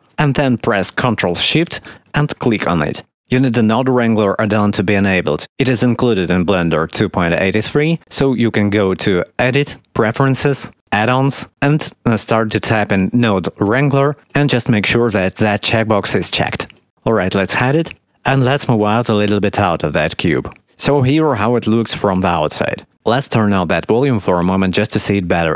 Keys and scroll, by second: 13.8 n, 14.0 d, 14.1 e.